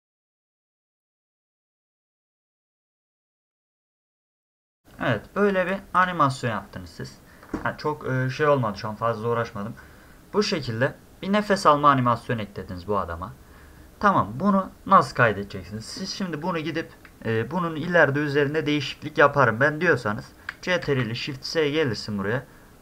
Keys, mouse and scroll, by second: 0.0 click, 0.1 click, 0.2 click, 0.3 click, 0.4 click, 1.7 click, 1.8 click, 2.0 click, 2.6 click, 2.7 click, 5.0 middle click, 5.6 space, 5.7 drag, 10.9 scroll up 2, 14.2 scroll down 2, 20.8 ctrl+shift+s.